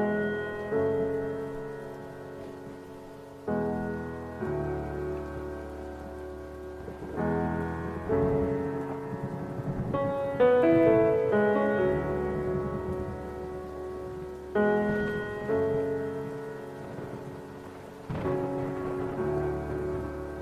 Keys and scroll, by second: 2.8 b, 7.8 ctrl+i, 9.6 ctrl+alt+shift+e.